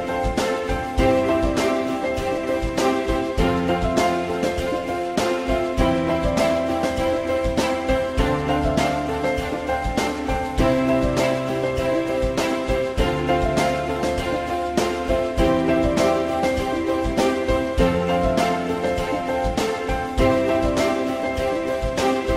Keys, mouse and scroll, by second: 6.0 ctrl+z, 14.7 click, 14.9-16.1 typing, 17.2 shift+click.